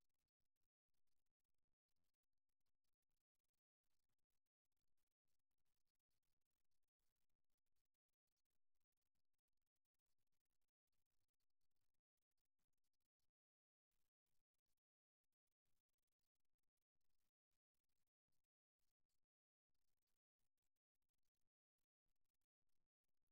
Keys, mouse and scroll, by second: 1.9 e, 5.5-7.2 middle drag, 13.2-14.2 right drag, 14.2 middle click, 15.8 s, 21.8-23.3 middle drag.